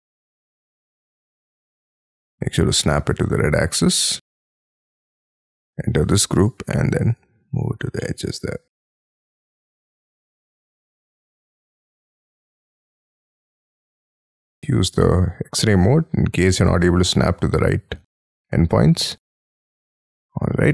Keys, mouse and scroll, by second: 1.7-2.1 scroll up 2, 2.1 Right, 3.6 scroll down 6, 3.9 space, 4.1 middle click, 4.6-5.1 scroll up 10, 5.5 double click, 6.0 o, 7.3-7.8 scroll down 13, 8.0 middle click, 8.6-10.3 scroll up 5, 11.0 middle click, 12.5 middle click, 12.7 scroll down 5, 14.5 y, 16.1-18.0 scroll up 14, 18.0 y, 18.3-19.5 scroll down 25, 19.6 middle click, 20.0 space.